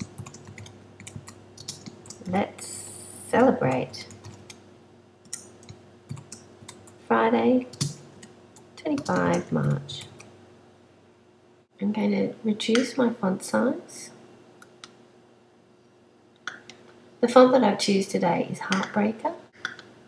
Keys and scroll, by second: 0.0-4.2 typing, 5.7-6.7 typing, 8.0-10.0 typing.